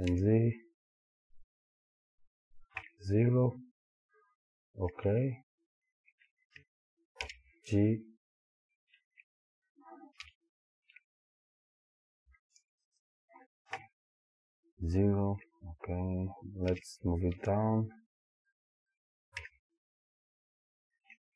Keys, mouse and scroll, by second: 2.0 click, 2.8 KP_0, 7.2 g, 13.0 click, 13.8 KP_0, 16.7 g, 18.7 click, 19.4 KP_0.